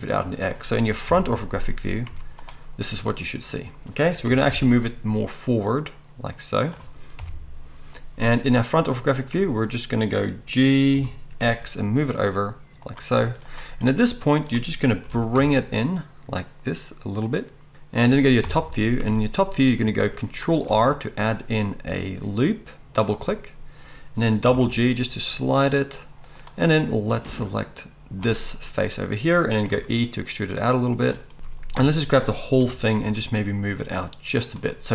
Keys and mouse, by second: 0.3-13.8 middle drag, 1.1 KP_1, 2.0 z, 4.2 g, 7.1 KP_1, 10.9 g, 13.1 z, 13.8-17.7 drag, 15.0 g, 17.7 middle click, 18.4 KP_7, 20.7 ctrl+r, 24.4 g, 26.2 middle click, 26.6-31.1 drag, 29.7 e, 31.1-34.9 middle drag, 31.3 KP_7, 31.7 a, 32.5 g.